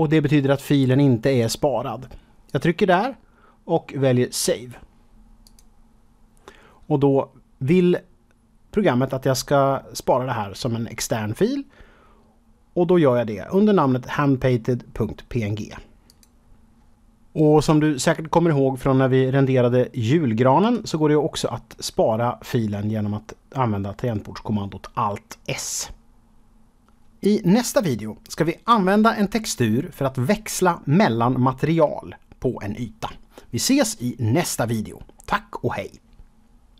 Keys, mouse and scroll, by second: 2.4 click, 5.4 click, 16.0 click, 20.6 click.